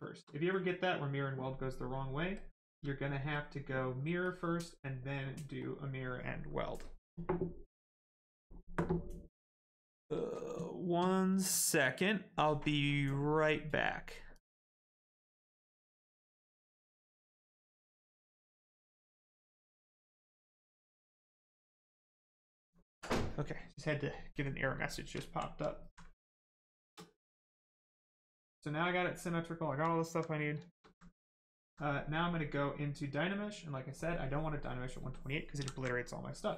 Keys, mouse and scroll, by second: 0.5 click, 2.3 shift+click, 3.3 click, 5.5 click, 22.7 click, 24.3 right click, 24.9 shift+right click, 25.3 alt+right click, 25.5 alt+right click, 25.7 alt+right click, 26.0 right click, 26.1 right click, 27.4 alt+right click, 28.1 right click, 28.2 right click, 29.9 alt+right click, 30.2 right click, 30.3 right click, 30.5 shift+right click, 30.8 alt+right click, 31.1 right click, 31.2 right click, 33.7 click, 34.7 right click, 35.5 ctrl+z, 35.9 right click.